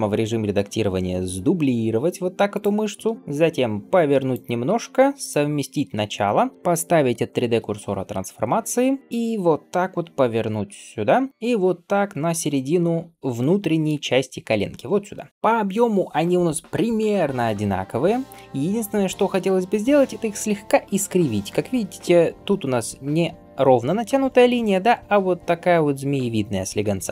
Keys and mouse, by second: 0.1 a, 1.5 shift+d, 3.1-6.3 right drag, 3.2 r, 4.5 g, 6.3-11.1 middle drag, 9.1 r, 15.3-27.1 drag.